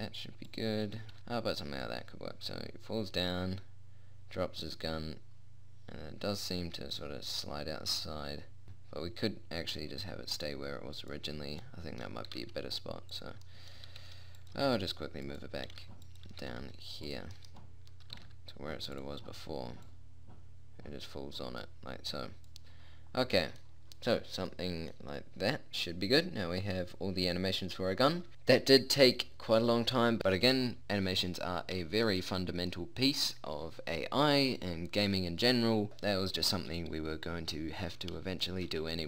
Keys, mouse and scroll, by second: 0.1 r, 2.3 click, 2.7-4.1 middle drag, 12.1 middle click, 12.7 r, 14.3 g, 15.0 g, 16.1 g, 16.9 r, 17.8 middle click, 18.7 r, 20.3-22.1 drag, 22.1 middle click, 23.9-26.3 middle drag, 26.3 click, 27.3 click, 28.1-32.2 middle drag, 37.2-39.0 middle drag.